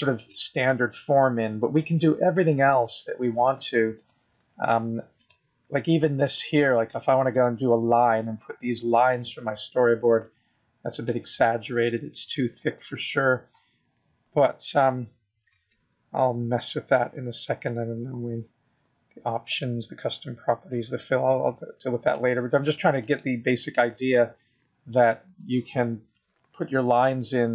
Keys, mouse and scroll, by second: 6.4 click, 9.8 click, 11.6 click.